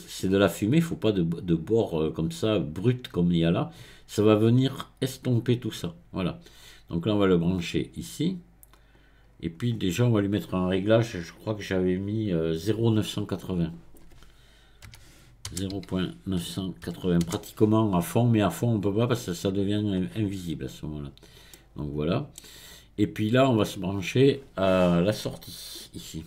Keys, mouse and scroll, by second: 0.2 click, 7.5 click, 9.7-10.9 scroll up 1, 10.9-12.9 scroll up 1, 13.6-16.7 drag, 19.9-21.5 scroll down 1, 21.5 middle click, 22.5-23.7 scroll down 1, 23.7 click.